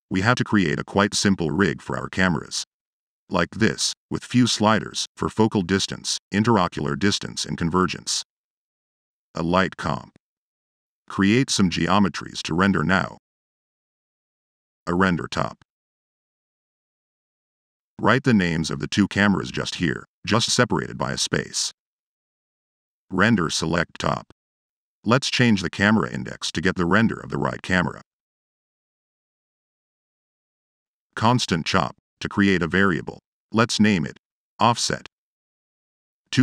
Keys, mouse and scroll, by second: 3.0-4.2 drag, 4.7-5.7 drag, 6.0-7.7 drag, 7.9 click, 9.3 click, 10.1 click, 10.6 click, 11.1 click, 13.6 click, 14.1 click, 14.5 click, 14.6-15.4 typing, 16.6 click, 17.8 click, 20.9 click, 21.9 Tab, 22.3-23.3 typing, 24.2 click, 24.7 click, 26.1 click, 26.8 click, 27.3 click, 29.4 click, 30.4 click, 30.5-31.4 typing, 31.6 click, 32.6 click, 33.1 click, 35.5 click, 35.6 Tab.